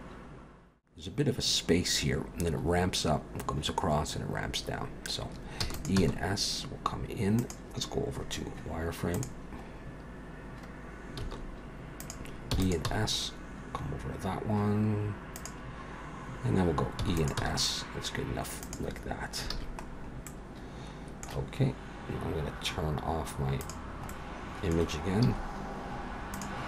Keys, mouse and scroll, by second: 4.7-5.6 scroll down 2, 5.6 e, 6.0 s, 9.2 click, 9.7-10.5 scroll up 2, 10.5-11.2 scroll down 1, 11.2 s, 12.5 e, 12.9 s, 17.0 e, 17.4 s, 19.5 alt+a, 19.8-20.4 scroll down 2, 20.3 middle click, 23.6 click, 24.1 middle click, 25.3 z.